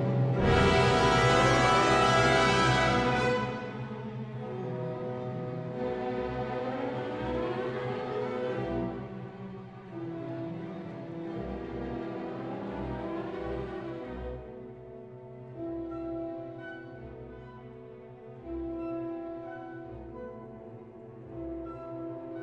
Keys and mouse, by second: 3.7 Tab, 8.9 click, 9.8 click, 10.0 Tab, 11.0 ctrl+r, 17.5 click, 19.3 click, 20.4 Tab.